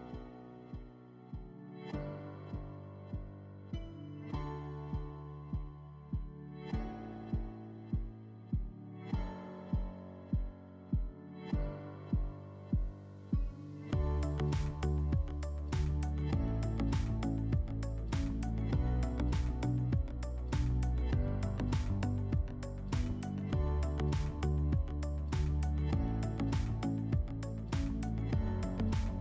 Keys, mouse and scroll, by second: 5.9-7.5 drag, 9.0-10.5 drag, 17.7 click, 18.3 Delete, 18.7-20.0 drag, 19.4 Delete, 26.0-27.4 drag.